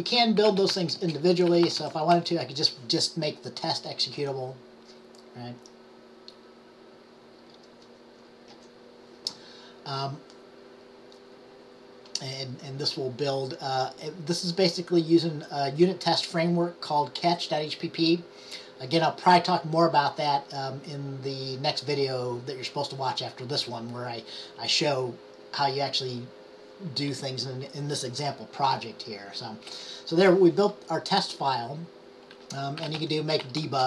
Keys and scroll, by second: 0.3-2.4 typing, 32.7-33.8 typing.